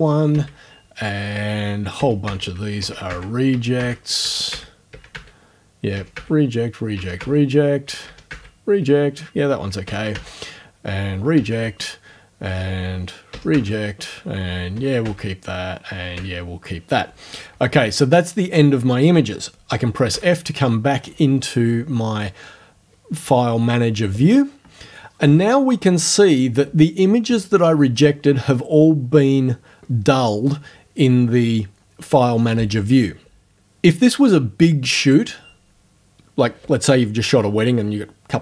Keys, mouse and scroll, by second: 0.3 Right, 2.0-4.9 typing, 2.3 Right, 3.1 Right, 3.8 Right, 4.5 Right, 5.1 Right, 6.0 r, 6.2 Right, 7.0 r, 7.2 Right, 8.1 r, 8.3 Right, 9.9 1, 10.1 Right, 11.4 r, 11.5 Right, 13.3 r, 13.5 Right, 14.8 1, 15.0 Right, 16.2 1, 20.1 f.